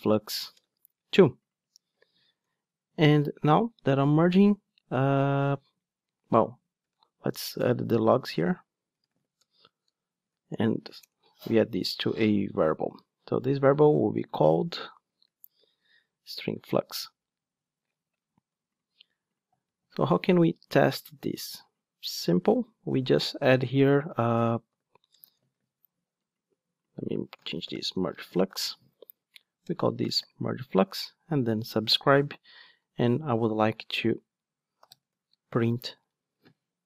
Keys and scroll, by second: 8.2 super+z, 9.4 Return, 11.0 alt+Return, 16.0 Return, 30.6 Return, 36.4 Return.